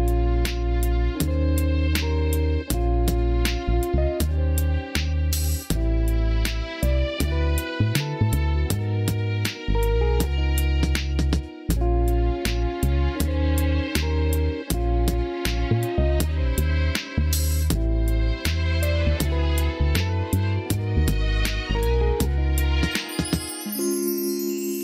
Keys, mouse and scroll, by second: 0.1 shift+middle click, 1.1 click, 2.0 k, 4.3 k, 6.7 Tab, 6.9 click, 7.1 Tab, 7.8 middle click, 8.1 shift+middle click, 9.4 click, 10.3-11.4 shift+drag, 12.0 s, 13.8-15.7 drag, 16.4 Tab, 17.2 click, 17.8 click, 18.2-21.9 drag, 21.9 Tab, 22.9-23.2 drag, 23.6 middle click.